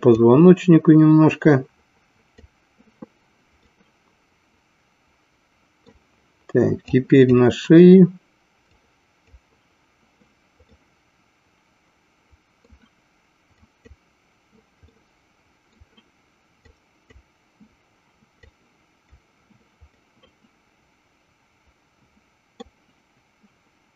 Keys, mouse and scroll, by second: 0.3-2.7 drag, 3.7-5.9 middle drag, 7.1 click, 8.8 click, 10.8-12.7 middle drag, 13.8 click, 15.0 middle click, 16.8 click, 18.6 click, 19.9-22.8 middle drag.